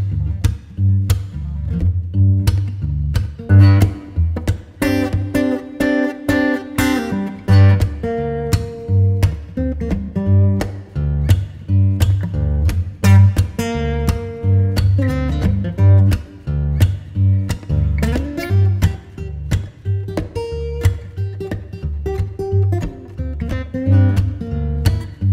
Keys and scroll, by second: 3.2 Return, 4.1 z, 6.0 v, 21.0 Return, 21.6 z, 22.6 space.